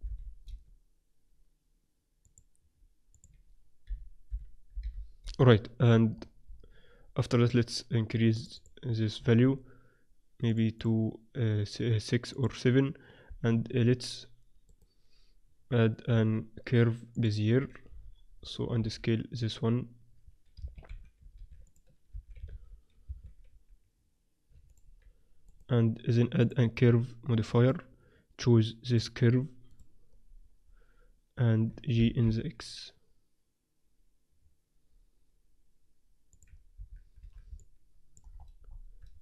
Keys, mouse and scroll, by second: 2.2-4.9 drag, 6.1-8.3 middle drag, 8.3-14.2 drag, 13.5 z, 14.6-16.5 drag, 16.1 shift+a, 17.8 z, 17.9-19.2 drag, 18.8 s, 19.4 middle click, 20.8 s, 22.0 s, 23.4 s, 25.5 click, 26.4 middle click, 27.2 click, 28.8-30.7 drag, 32.1 g, 36.7 z, 37.2 z, 37.5-39.2 middle drag.